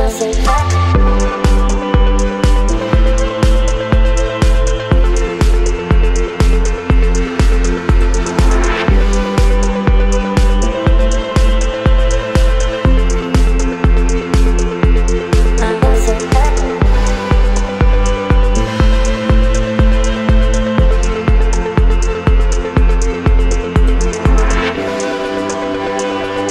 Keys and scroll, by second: 0.9 v, 3.2 ctrl+t, 6.2 Return, 7.1 space, 15.2 v, 15.6 ctrl+t, 19.4 space, 22.4 Left, 25.0 ctrl+t.